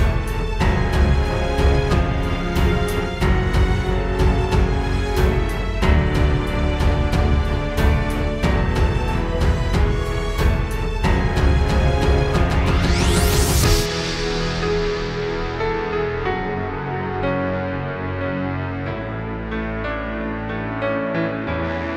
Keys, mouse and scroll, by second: 1.1 space, 5.6 click, 9.1 click, 15.3 space, 16.6 right click, 18.4 right click.